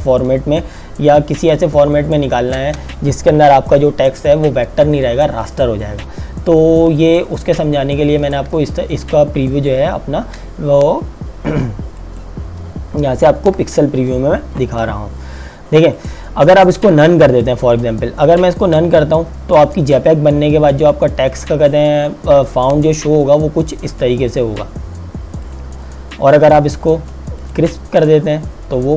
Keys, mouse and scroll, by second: 0.6 click, 0.8 space, 8.6 click, 9.0 space, 12.0 click, 13.4 Escape, 16.0 click, 25.5 click.